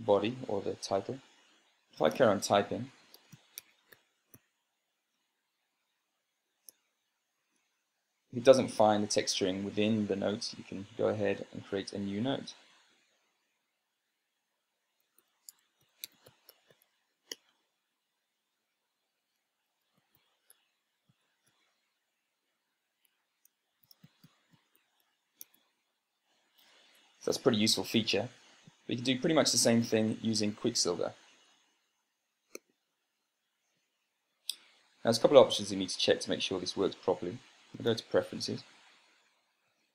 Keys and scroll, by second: 3.7-5.1 typing, 7.5-8.1 typing, 15.3-17.8 typing, 18.1 Return, 20.1-22.6 typing, 24.3-26.6 typing, 38.5 super+space.